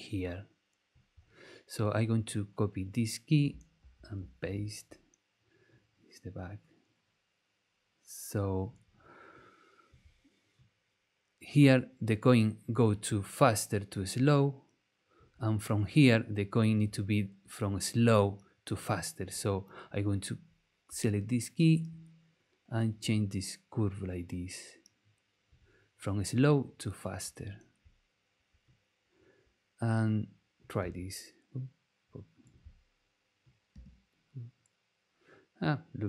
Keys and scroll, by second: 3.8 super+c, 4.2 super+v, 30.8 space, 33.7 space.